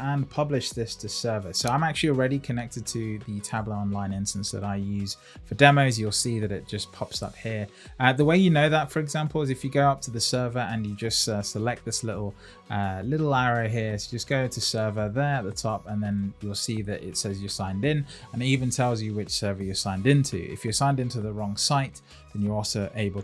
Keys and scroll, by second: 11.5 Up, 15.3 Up.